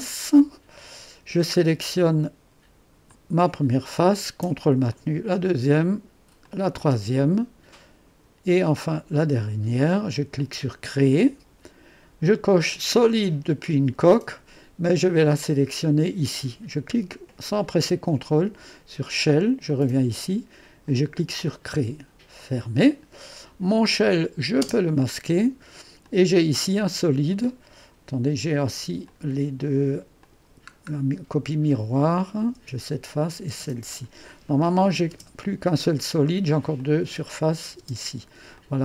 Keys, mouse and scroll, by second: 19.7 click, 20.9 click, 22.4 click, 24.1 click, 24.7 space, 26.1 click, 29.1 click, 30.3-32.6 drag, 32.6 space, 33.2-35.3 drag, 33.6 space, 35.2 space, 36.8-38.8 drag, 37.1 space, 37.9 space.